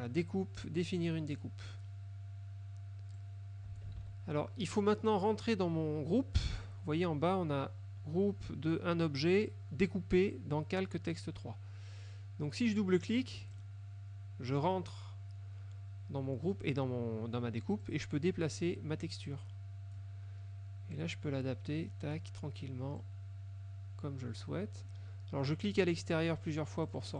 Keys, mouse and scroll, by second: 1.4 click, 3.2 click, 4.0 ctrl+z, 13.4 click, 18.0-20.2 drag, 21.0-22.4 drag, 23.1-25.1 drag, 26.5 click.